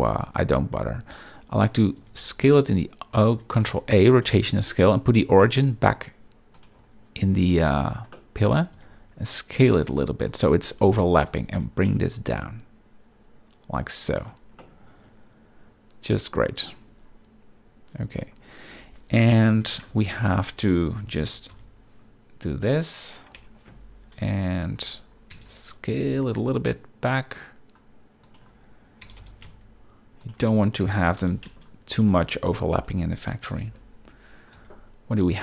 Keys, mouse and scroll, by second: 2.0 s, 3.1 right click, 3.6 ctrl+a, 5.4 space, 8.1 middle click, 8.7 s, 10.3-10.6 drag, 11.5 g, 14.1 shift+click, 14.6-16.7 middle drag, 19.5 KP_7, 19.9 Tab, 21.1 s, 21.5 y, 22.9 click, 23.4 Tab, 25.3 s, 25.9 y, 29.0 g, 29.2 y, 30.8 s, 31.2 y, 31.9 shift+click, 33.5 KP_0, 34.5 z.